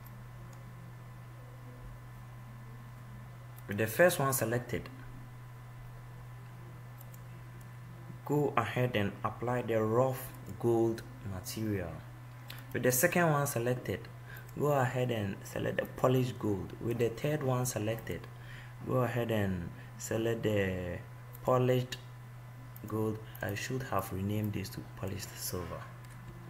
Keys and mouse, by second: 7.3-8.3 middle drag, 14.7-17.4 middle drag, 18.2 middle click.